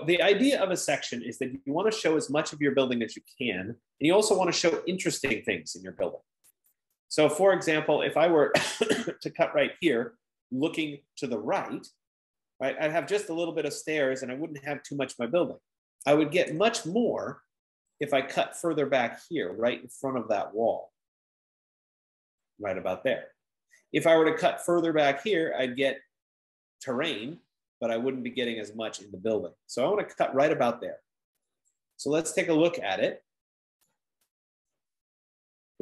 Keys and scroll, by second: 0.2-1.3 typing, 3.2 typing, 3.4 F15, 16.2-17.4 typing.